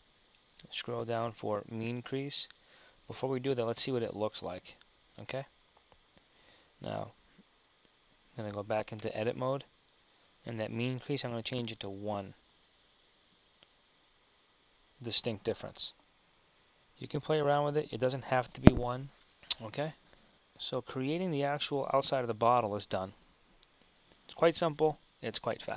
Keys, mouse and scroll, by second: 4.0 Tab, 6.9 Tab, 9.1 Tab, 14.1 Tab, 19.9 KP_1.